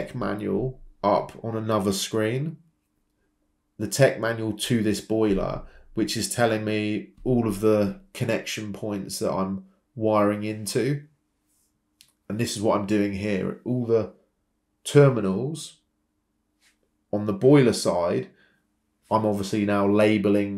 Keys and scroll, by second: 2.3 Escape, 5.0-7.7 typing, 13.2 Escape, 13.2 typing, 17.3 Escape, 17.3 typing, 19.2-19.9 typing.